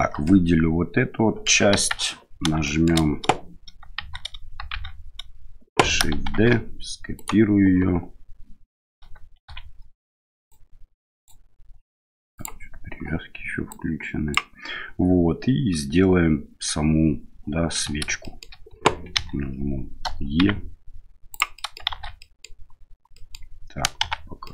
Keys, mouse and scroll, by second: 0.2-1.4 middle drag, 1.7 KP_1, 2.6 shift+middle click, 3.9 shift+z, 4.7 shift+z, 6.3 shift+d, 9.4 shift+z, 10.4 click, 12.3 click, 13.7 click, 18.2 shift+middle click, 19.1 e, 21.6 middle click, 21.9 shift+z, 22.2 middle click, 23.2 middle click, 24.0 f, 24.4 middle click.